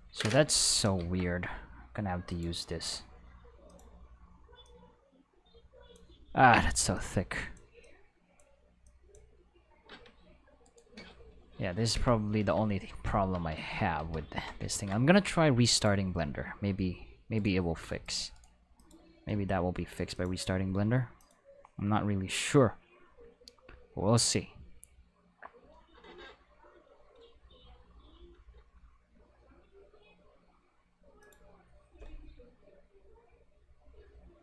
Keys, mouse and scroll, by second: 0.3 ctrl+z, 1.0 ctrl+z, 2.3 click, 3.7 click, 4.6-5.9 drag, 6.9 click, 7.8 click, 8.8 click, 9.9 Tab, 10.6 click, 10.6 right click, 11.0 Escape, 14.0 a, 14.7 ctrl+s, 15.7 click, 17.3 right click, 18.0 click, 18.8 click, 20.1 click, 21.2 click, 31.2 click.